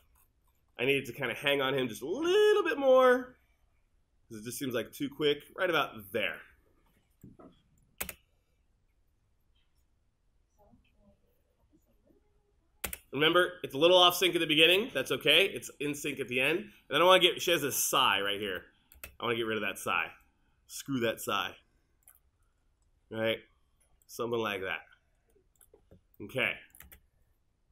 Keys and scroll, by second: 8.1 space, 12.9 space, 18.5 space, 26.9 space.